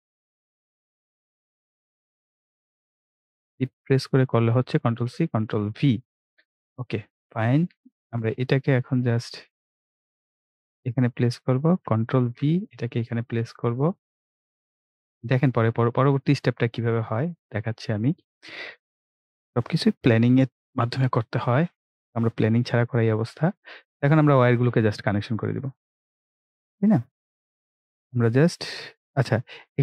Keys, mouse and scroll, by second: 4.6 ctrl+c, 4.9 ctrl+v, 6.4 scroll down 1, 10.9 click, 12.2 ctrl+v, 16.0 click, 18.0-19.0 scroll up 1, 19.2-20.7 drag, 20.7 Delete, 23.2-23.5 scroll up 1, 24.4 click.